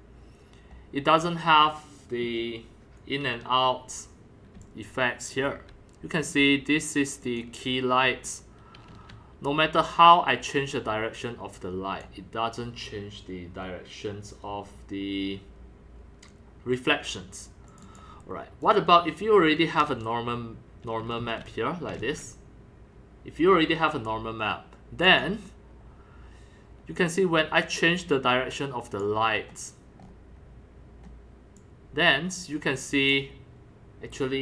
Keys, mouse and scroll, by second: 0.7 scroll up 1, 4.4 scroll down 1, 4.6-5.6 c, 4.6 click, 5.7 c, 7.2 click, 8.1 middle click, 8.1 scroll, 8.5 scroll up 1, 8.9 e, 9.9-13.0 drag, 15.6-17.1 drag, 17.7 click, 18.6 click, 21.2 ctrl+z, 22.1 ctrl+z, 24.0 click, 24.4 click, 25.0 click, 25.2-29.4 drag, 29.3-29.9 scroll down 1, 30.0 scroll up 4, 30.3-30.9 scroll down 3, 30.9 scroll up 1, 31.6-32.7 drag, 33.1-34.4 drag.